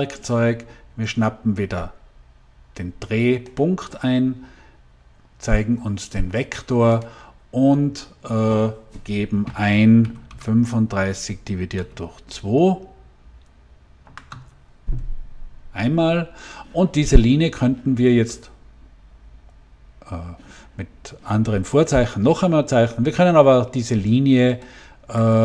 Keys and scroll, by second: 9.9 3, 10.2 5, 10.8 /, 12.0 2, 13.9 Return.